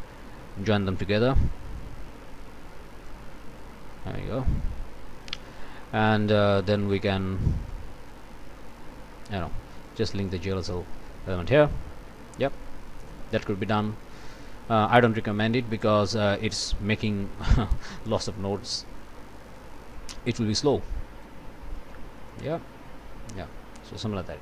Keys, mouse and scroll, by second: 0.2-2.0 ctrl+drag, 3.6-5.4 drag, 5.8 click, 6.5 scroll up 2, 6.9 click, 7.7 click, 8.7 click, 9.8-10.9 drag, 12.4 click, 14.0 click, 19.9-21.4 drag, 22.3-24.0 drag.